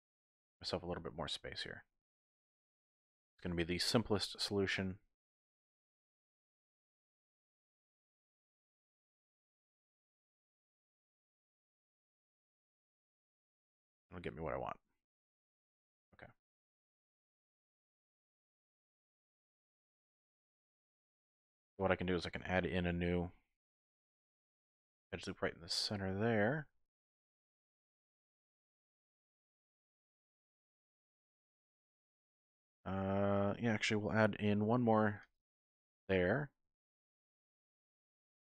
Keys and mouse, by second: 0.2 click, 1.1 shift+click, 3.4 z, 4.3-5.8 drag, 4.5 typing, 5.6-6.9 typing, 7.5 middle click, 9.0 middle click, 10.6 g, 10.7 z, 13.6 click, 13.9-15.2 middle drag, 15.9 middle click, 16.6 click, 16.6 typing, 18.3 click, 19.8 middle click, 20.8 middle click, 21.2 shift+middle click, 23.1 ctrl+r, 24.7 click, 25.6 shift+click, 26.7 ctrl+r, 27.5 click, 28.0 click, 28.9 shift+click, 30.1 shift+click, 31.5 2, 32.7 click, 34.7 ctrl+r, 35.4 click, 37.8 x.